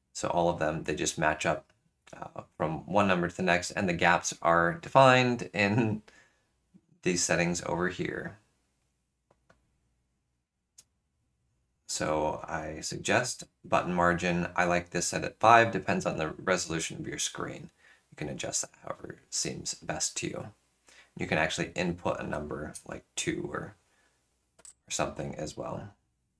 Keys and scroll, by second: 24.6 5.